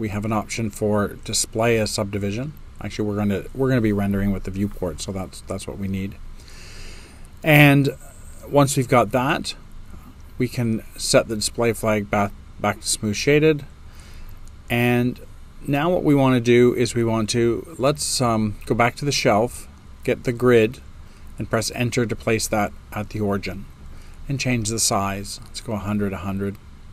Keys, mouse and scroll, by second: 21.8 Return.